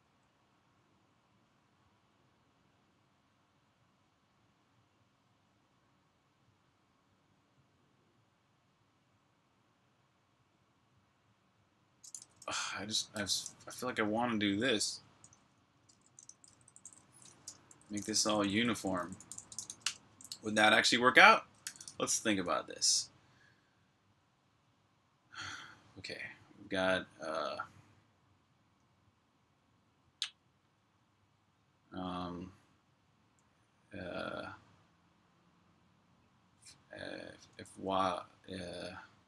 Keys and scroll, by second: 12.0-13.7 typing, 14.8-19.7 typing, 21.1-22.5 typing, 37.3 typing.